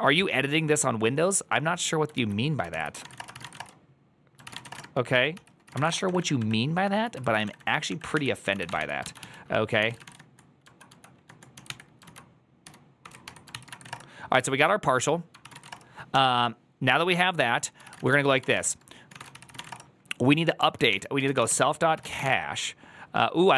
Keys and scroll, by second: 2.6 alt+{, 2.6 ctrl+c, 2.7-14.1 typing, 4.2 ctrl+c, 4.6 Return, 4.7 ctrl+^, 5.2 ctrl+c, 7.0 ctrl+c, 15.3 ctrl+c, 15.4-22.6 typing, 15.6 Return.